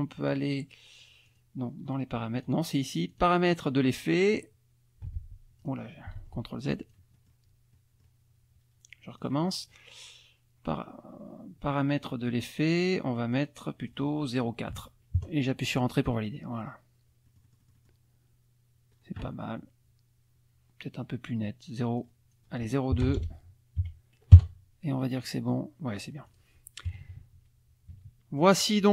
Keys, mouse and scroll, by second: 1.3 click, 2.4 click, 3.1 click, 4.3 click, 5.6 click, 6.2 ctrl+z, 6.8 ctrl+click, 7.7 middle click, 9.2 click, 13.3 click, 14.7 KP_4, 15.2 KP_Enter, 17.3 middle click, 22.0 click, 23.0 BackSpace, 23.8 KP_2, 24.3 KP_Enter, 26.3 click, 26.9 KP_Subtract.